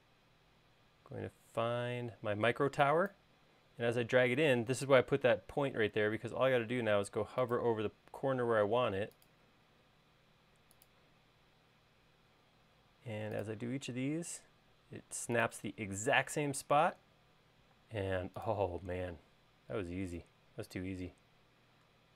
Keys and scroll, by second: 16.9 space, 18.9 space.